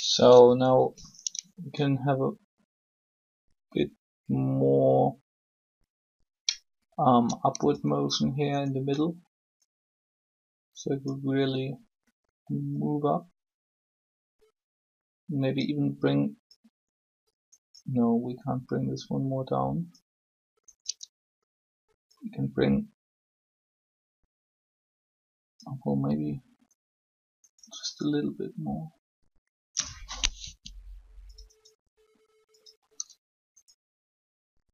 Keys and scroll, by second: 30.4 r.